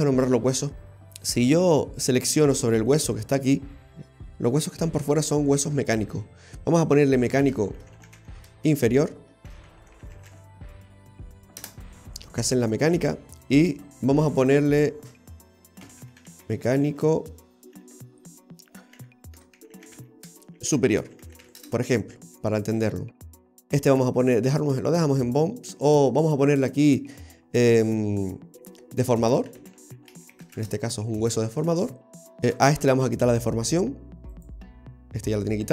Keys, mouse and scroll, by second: 1.4 scroll down 1, 1.5-3.0 scroll up 6, 3.0 right click, 3.0-4.2 scroll up 2, 13.5 right click, 14.4 click, 18.1 BackSpace, 18.2 BackSpace, 23.8 right click, 26.6 click, 32.2 right click, 33.3 click, 34.4 right click.